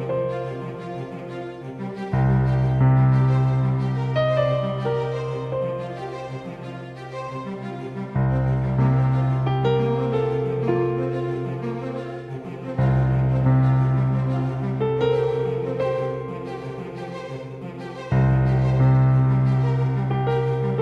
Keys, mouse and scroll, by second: 7.7 s, 12.7-15.0 drag, 18.0 z, 18.9 middle click, 20.1 middle click.